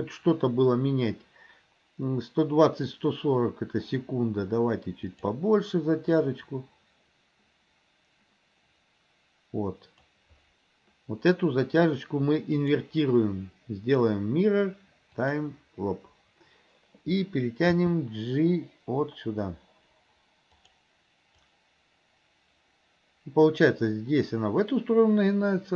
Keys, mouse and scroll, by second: 6.4-10.2 drag, 12.6-15.4 right drag, 17.7 g, 21.6-25.7 drag.